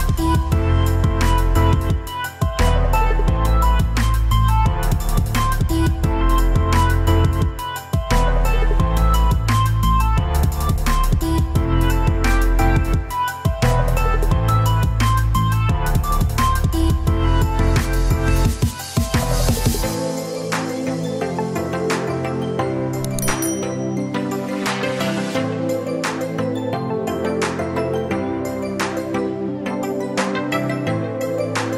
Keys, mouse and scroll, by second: 0.3 click, 1.0 shift+click, 1.8 shift+click, 2.5 shift+click, 4.2 click, 5.4-6.9 drag, 6.9 ctrl+v, 8.6 ctrl+b, 12.2-15.2 drag, 18.7-21.8 drag, 23.8 click, 24.7 click, 26.2 Tab, 27.4 click.